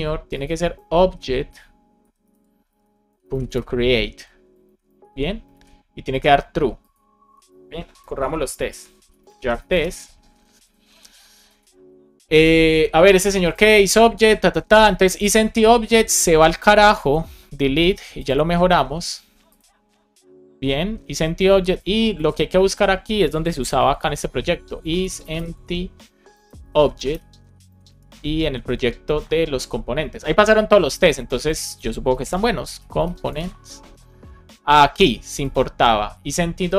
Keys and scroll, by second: 1.0 shift+o, 4.0 shift+9, 4.5 super+Right, 4.9 shift+0, 5.4 super+s, 7.9 ctrl+c, 9.3 space, 9.7 Return, 22.0 shift+super+f, 24.9 shift+e, 26.4 shift+o, 27.6 shift+super+Left, 27.8 super+c, 28.0 Down, 28.5 Tab.